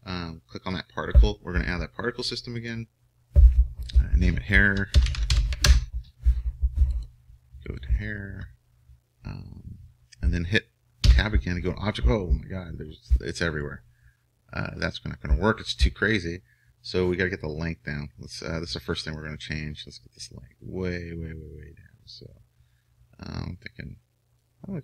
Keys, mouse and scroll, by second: 7.8-11.2 drag, 11.2 Tab, 13.6-17.7 middle drag, 17.7-19.3 drag.